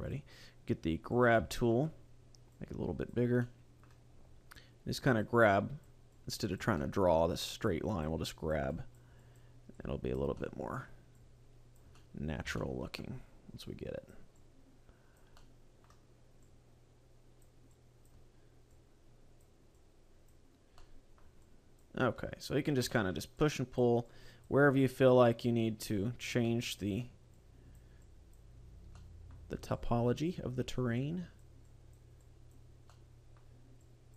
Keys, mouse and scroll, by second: 1.3 click, 1.5 shift+middle click, 2.5 click, 3.5 middle click, 4.2 scroll up 2, 4.6 click, 5.5 click, 6.2 click, 6.8 middle click, 7.7 click, 8.3 click, 8.9 click, 9.3 click, 9.8 click, 10.4 middle click, 11.2 click, 12.0 middle click, 12.6 shift+middle click, 13.7 click, 14.5 click, 15.4 middle click, 16.5 click, 17.7 click, 18.7 click, 19.8 click, 20.8 middle click, 21.4 click, 22.2 click, 23.0 middle click, 23.4 click, 24.1 click, 24.9 click, 25.9 click, 26.5 middle click, 27.3 click, 28.1 click, 28.7-29.1 scroll down 2, 28.9 middle click, 29.8 click, 31.1 click, 31.7 click, 32.2 click, 32.9 middle click, 33.9 click.